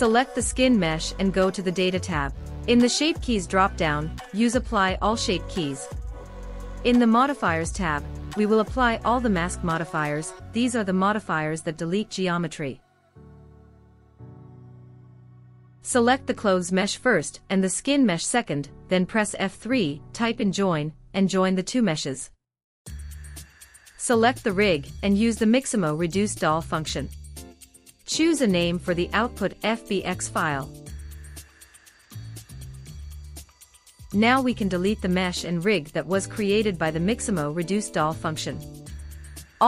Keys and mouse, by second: 2.1-3.6 drag, 6.2 click, 7.8 click, 8.3 click, 9.1 click, 9.6 click, 10.7-11.9 drag, 13.0-14.4 drag, 15.2-16.2 drag, 17.5 click, 19.9 F3, 25.4 click, 27.6 click, 35.7 x.